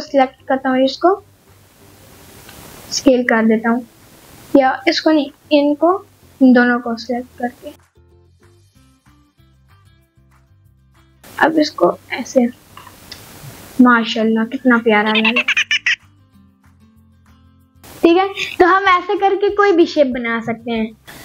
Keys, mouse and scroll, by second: 0.4 middle click, 0.9 s, 1.0 x, 2.0 right click, 3.0 s, 4.0 right click, 4.6 middle click, 5.6 shift+click, 6.0 middle click, 7.0 middle click, 8.4 shift+click, 8.9 shift+click, 9.4-10.8 middle drag, 11.6 s, 11.8 x, 13.0 click, 13.2-14.1 scroll down 2, 13.6-15.2 middle drag, 15.4 click, 16.0-16.6 scroll up 2, 16.4 click, 18.0 Tab, 18.4 scroll up 1, 18.5 middle click, 18.9-20.5 scroll down 1, 20.9 scroll down 2, 21.0 middle click.